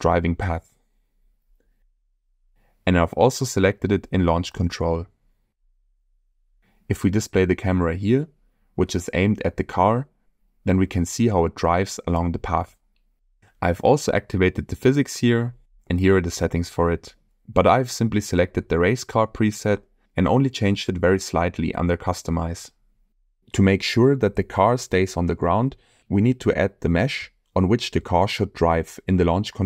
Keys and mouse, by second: 0.3 click, 2.8 n, 4.1 click, 9.3 click, 12.0 space, 13.8 space, 23.7 n, 27.1 click, 28.1 click.